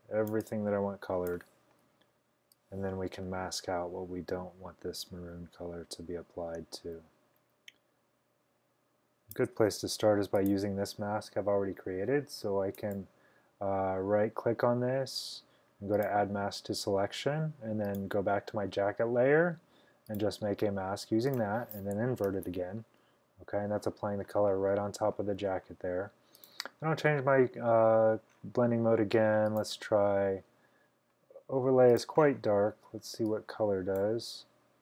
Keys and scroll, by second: 1.7-2.4 typing, 22.3 super+i.